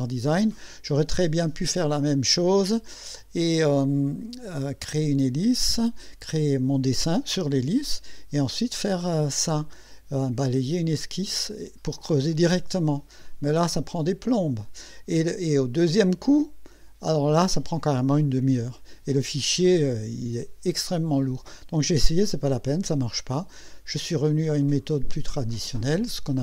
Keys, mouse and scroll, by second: 24.3 click, 25.5 click.